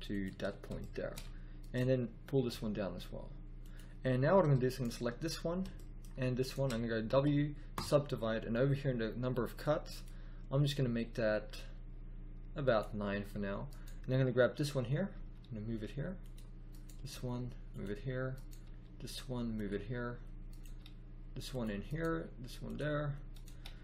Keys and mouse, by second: 2.3 g, 3.4 click, 7.0 w, 9.5 click, 10.6-12.5 drag, 13.0 middle click, 15.1 g, 15.5 middle click, 15.7 middle click, 16.9 g, 18.6 g, 20.6 g, 22.0 g, 23.5 g.